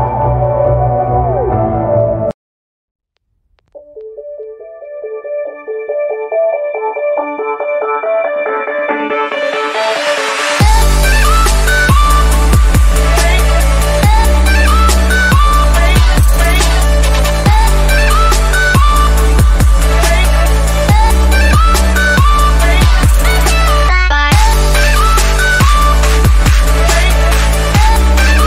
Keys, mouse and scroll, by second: 2.7 click, 5.1 right click, 5.1 right click, 5.9-11.0 drag, 11.0 right click, 11.5-28.4 drag.